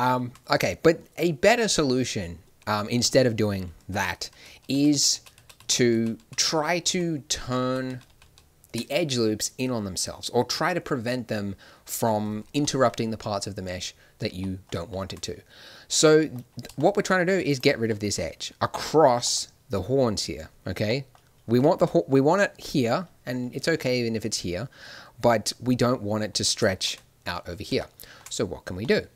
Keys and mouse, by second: 0.5-4.1 middle drag, 4.1 ctrl+z, 4.3 ctrl+z, 4.7 ctrl+z, 4.9 ctrl+z, 5.1 ctrl+z, 5.1 middle click, 5.3 ctrl+z, 5.5 ctrl+z, 5.9 ctrl+z, 6.1 ctrl+z, 6.4 ctrl+z, 6.8 ctrl+z, 7.3 ctrl+z, 7.6 ctrl+z, 7.8 ctrl+z, 8.0 ctrl+z, 8.2 ctrl+z, 15.1 middle click, 16.2 middle click, 17.4-19.2 drag, 21.7 middle click, 23.4-24.5 middle drag, 25.3-26.7 middle drag.